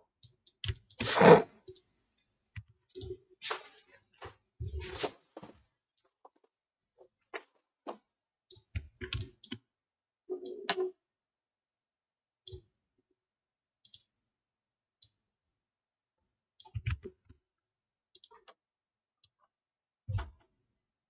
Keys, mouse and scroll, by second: 8.8-11.6 alt+scroll down 1, 16.8 ctrl+z.